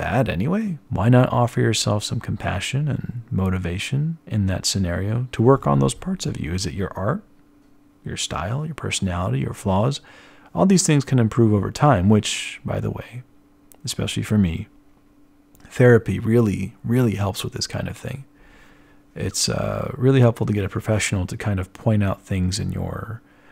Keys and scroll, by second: 12.2-13.9 typing, 18.6 ctrl+alt+1, 19.2 b.